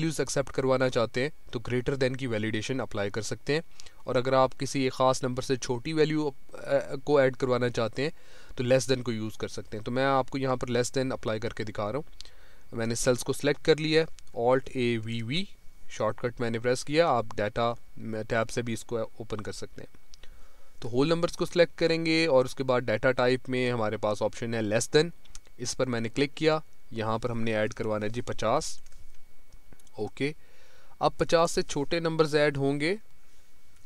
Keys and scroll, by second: 14.6 alt+a, 14.9 alt+v, 15.3 alt+a.